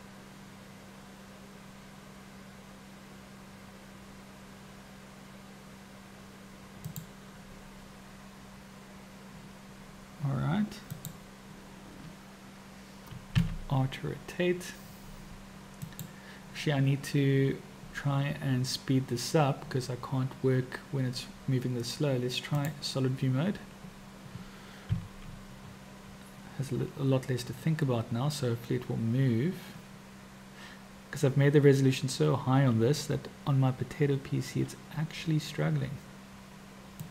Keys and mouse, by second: 10.9-13.4 drag, 13.4 r, 22.7 click, 27.4 r.